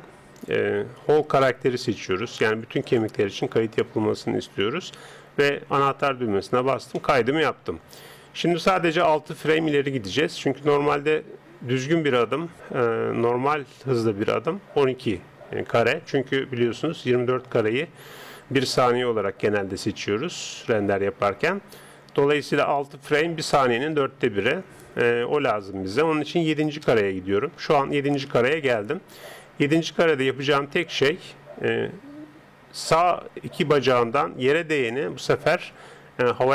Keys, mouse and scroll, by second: 0.5 click, 5.8 click, 7.0-15.0 middle drag, 25.4 click, 33.7 right click, 35.7 g.